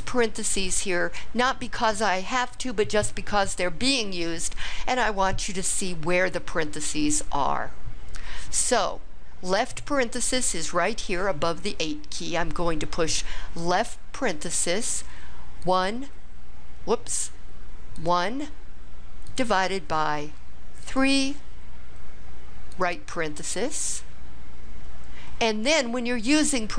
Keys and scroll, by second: 13.6 (, 18.5 1, 19.3 /, 20.9 3, 22.7 ).